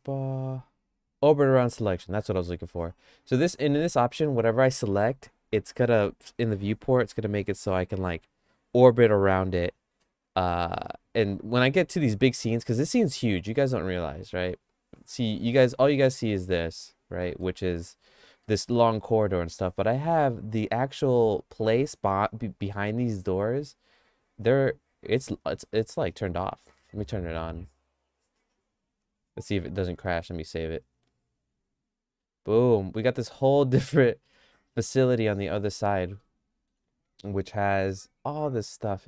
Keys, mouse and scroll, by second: 16.2 click, 16.8 click, 17.2 middle click, 17.6 shift+middle click, 18.4 middle click, 21.2 click, 22.6 middle click, 30.2 ctrl+s, 31.6 click, 32.8 middle click, 33.2-34.3 shift+middle drag, 35.0 middle click, 35.8 middle click, 36.2 shift+middle click.